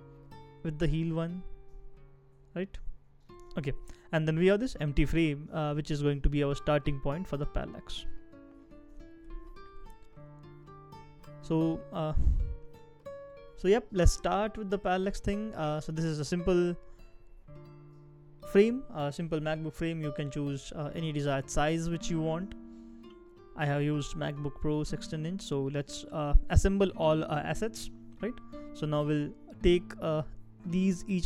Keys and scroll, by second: 3.4 super+z, 9.1 shift+e.